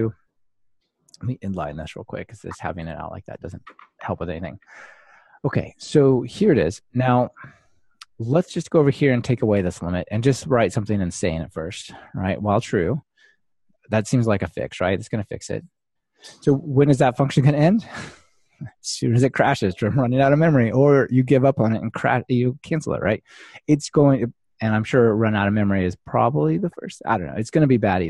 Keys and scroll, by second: 2.0 super+x, 2.8 Delete, 3.6 ctrl+alt+shift+Left, 3.8 super+v, 14.3 ctrl+alt+shift+Right.